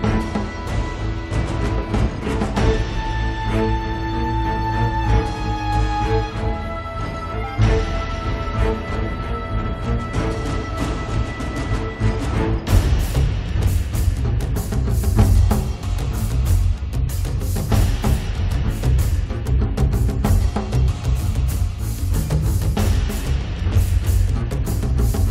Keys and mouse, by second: 0.7 g, 0.9 f, 0.9 middle click, 1.1 click, 1.6 click, 2.6-3.9 drag, 4.0 click, 4.9-7.1 drag, 4.9-6.6 middle drag, 4.9-6.6 right drag, 6.8 middle click, 6.8 right click, 7.7 KP_1, 8.1 g, 8.6 f, 9.4 click, 10.1-11.3 drag, 11.3-12.5 middle drag, 12.6 middle click, 12.9 click, 12.9 right click, 13.4 middle click, 13.9 click, 13.9 right click, 14.4 middle click, 15.3 click, 15.7 middle click, 15.8 click, 16.6 click, 17.3 click, 17.8-21.4 middle drag, 20.5 ctrl+s, 21.9 click, 22.4 middle click, 23.1 ctrl+s, 23.5 a, 23.7 middle click, 24.5 click, 24.5 alt+F3, 24.7-25.3 middle drag.